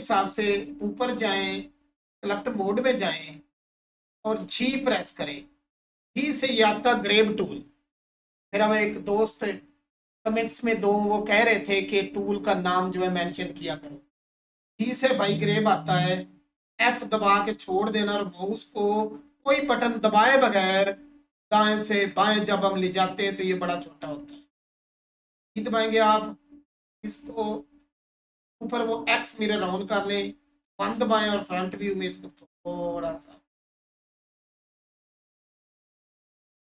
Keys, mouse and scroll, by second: 0.5 click, 24.2 click, 29.1 click, 30.6 1, 31.4 click, 35.9 3.